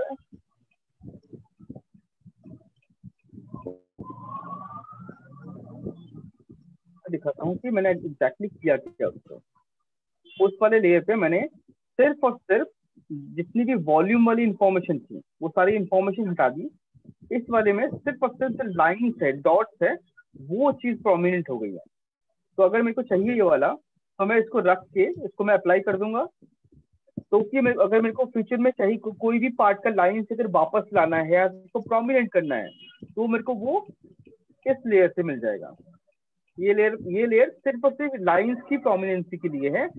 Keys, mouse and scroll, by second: 2.3 click, 3.1 alt+click, 4.6 right click, 6.3 right click, 8.3 click, 9.3 alt+click, 10.5 right click, 13.0 right click, 14.0 alt+click, 18.1 right click, 23.5 right click, 23.8 alt+click, 26.0 click, 33.0 click, 33.9 click, 34.8 click, 35.4 click.